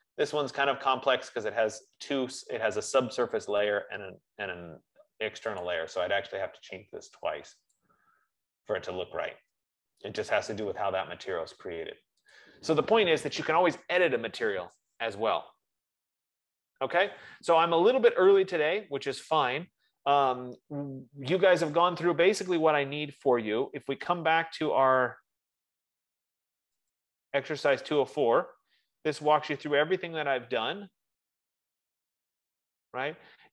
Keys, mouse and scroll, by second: 6.0 click, 8.1 click, 12.8 click, 13.5-17.7 drag, 25.8 click, 27.6 click, 32.6-33.2 scroll.